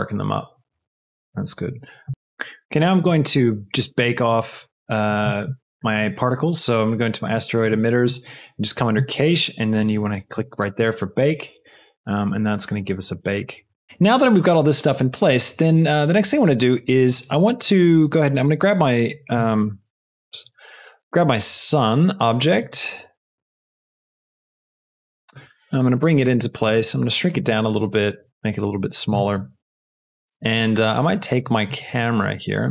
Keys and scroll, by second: 10.7 space, 19.7 KP_0, 25.4 g, 26.7 s.